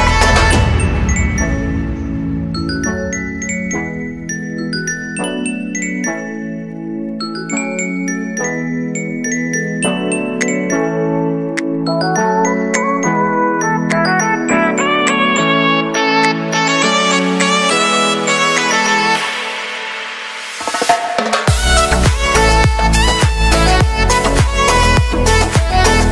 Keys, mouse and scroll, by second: 0.8 click, 1.9 drag, 2.9-3.8 scroll up 3, 3.8-5.3 shift+middle drag, 5.3-11.4 drag, 12.9 click, 14.5 click, 15.1-15.8 middle drag, 15.8 click, 16.6 scroll up 3, 17.0-18.6 shift+middle drag, 18.6 Tab, 21.2 click, 23.2-24.0 scroll down 11, 25.0-26.1 drag.